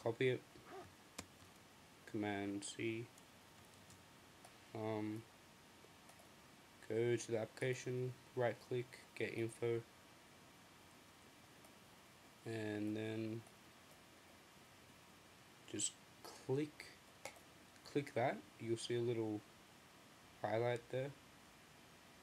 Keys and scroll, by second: 1.2 c, 2.9 super+m.